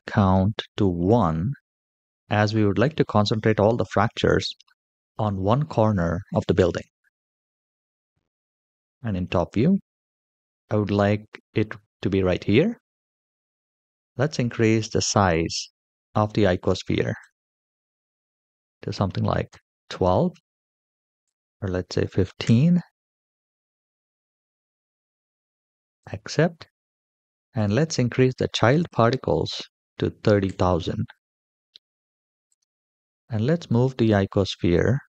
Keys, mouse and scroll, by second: 7.2 KP_7, 8.6-9.0 shift+middle drag, 14.2-16.4 drag, 17.0-19.3 drag, 21.0-22.2 drag, 25.8 click, 27.3-30.2 drag, 29.1 KP_0, 29.4 KP_0, 32.2 click, 33.7 g.